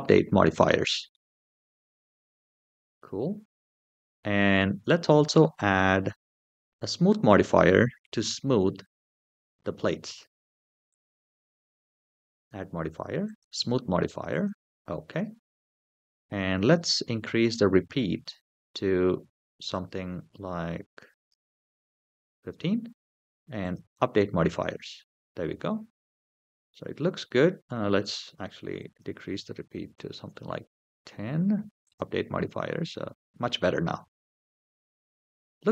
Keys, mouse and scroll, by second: 0.9-2.1 middle drag, 2.5 middle click, 11.6-14.3 drag, 15.4-17.4 scroll down 2, 19.5-21.1 drag, 23.4 click, 24.7-25.4 middle drag, 26.0-26.5 scroll up 2, 26.5-26.9 middle drag, 28.5-30.0 drag, 31.6 click, 32.4-35.6 middle drag.